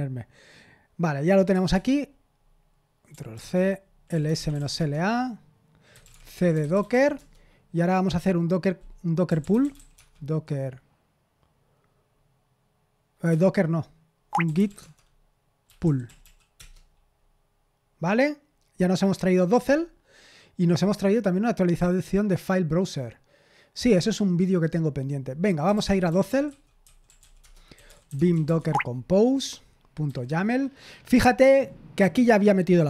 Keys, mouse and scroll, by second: 1.5 Return, 1.7 Return, 3.3 ctrl+c, 3.8-7.4 typing, 9.0-10.2 typing, 13.2-16.7 typing, 25.4-28.9 typing, 30.0 typing.